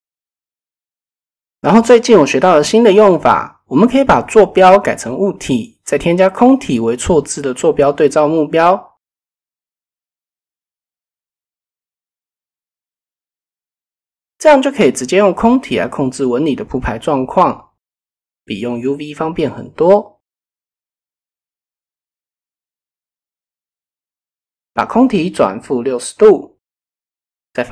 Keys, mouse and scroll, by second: 1.1 click, 2.5-3.6 drag, 5.4 shift+a, 12.0-13.1 drag, 14.5 KP_7, 16.1 click, 16.6 s, 18.6 r, 22.2-25.0 drag, 26.6-27.7 middle drag.